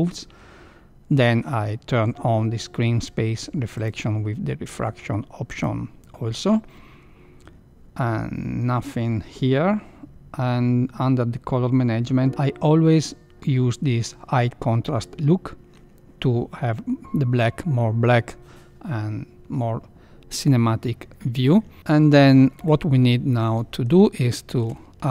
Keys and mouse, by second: 5.5 click, 22.5 KP_1, 23.5 shift+middle click, 24.3 shift+middle click.